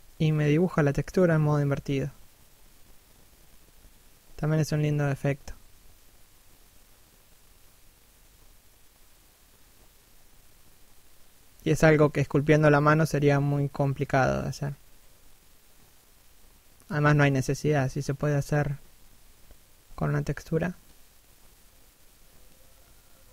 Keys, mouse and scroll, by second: 2.7 middle click, 3.4 middle click, 6.6 click, 8.8 middle click, 9.9 click, 12.2 middle click, 13.1-13.5 scroll down 1, 13.5 middle click, 14.0 scroll up 1, 14.4 click, 19.2 middle click, 19.8 scroll down 1, 20.2 middle click, 21.6 middle click.